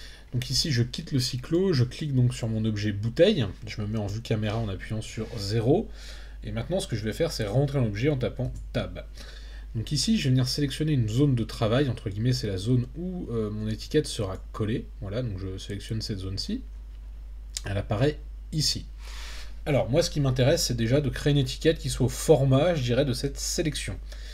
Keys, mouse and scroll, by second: 1.4 click, 3.9 KP_0, 8.4 Tab, 12.1-14.3 drag.